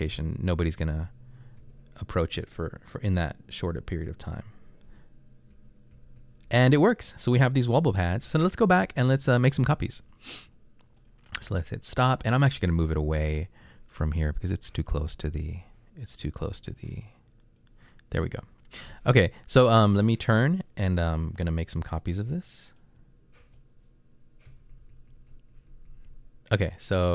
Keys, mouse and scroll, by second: 0.0-2.2 typing, 4.8-6.6 typing, 8.0-8.8 typing, 10.4-11.1 typing, 16.9 click, 21.9-26.7 typing.